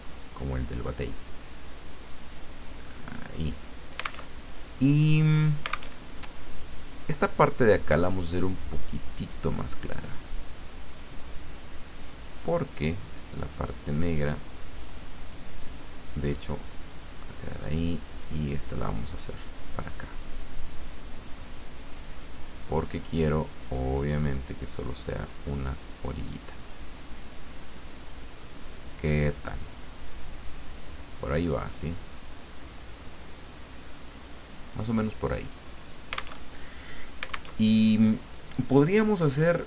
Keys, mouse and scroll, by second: 4.3 alt+Tab, 5.9 alt+Tab, 6.9 click, 9.4-11.2 drag, 12.3-15.5 drag, 16.3-17.5 drag, 18.2-26.9 drag, 27.6-29.3 drag, 30.1-34.4 drag, 35.4 click, 36.5 alt+Tab, 37.5 alt+Tab.